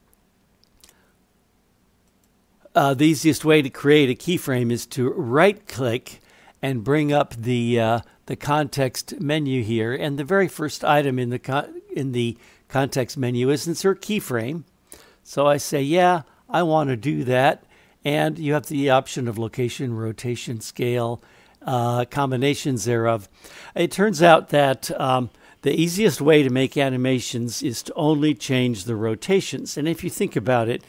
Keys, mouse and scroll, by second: 2.2-30.8 right drag.